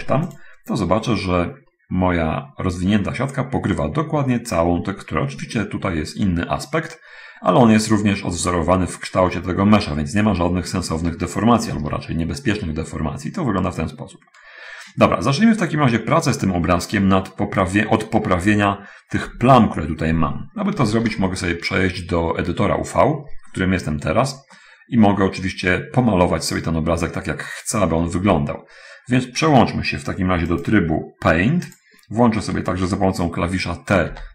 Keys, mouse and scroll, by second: 1.4-2.0 scroll up 1, 2.1-2.7 scroll up 1, 2.8-3.5 scroll up 2, 8.6-11.2 middle drag, 12.1 alt+z, 12.6-14.8 middle drag, 16.2 scroll up 2, 19.6 Tab, 21.4 shift+space, 24.1-24.5 scroll up 1, 24.7-26.2 middle drag, 27.0 scroll up 1, 28.4 middle click, 30.8 click, 32.1 click.